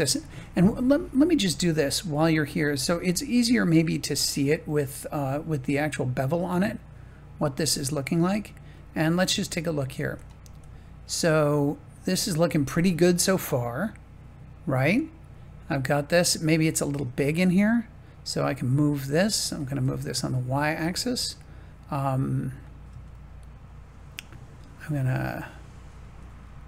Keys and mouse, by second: 0.2 Tab, 8.7-9.8 middle drag, 11.1-15.3 middle drag, 16.9 Tab, 18.2 click, 19.5 g, 19.8 y, 21.4-22.6 middle drag, 23.1 shift+middle click.